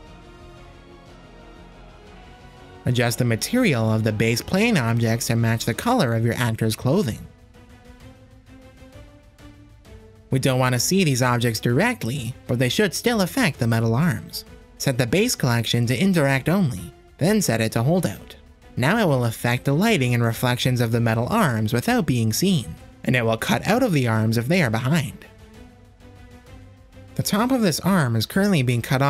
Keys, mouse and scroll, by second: 3.9 middle click, 4.9 click, 5.9-6.3 shift+middle drag, 7.7 click, 13.0 click, 13.8-15.9 drag, 18.0-19.8 drag, 22.4 shift+middle click, 23.0-23.5 drag, 24.3 click, 24.9 click, 25.6 click, 26.2 click.